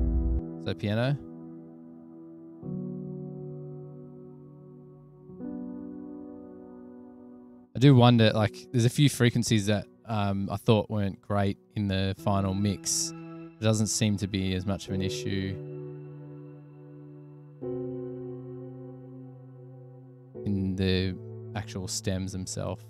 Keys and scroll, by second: 0.5 s, 1.7 super+=, 17.4 super+=, 18.5 super+[, 18.7 super+[, 22.5 super+=.